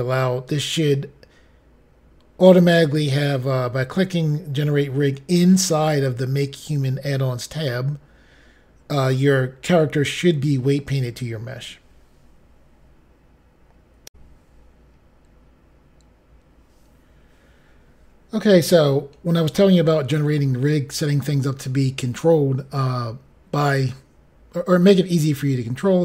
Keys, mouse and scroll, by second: 14.0 Pause, 14.1 Insert.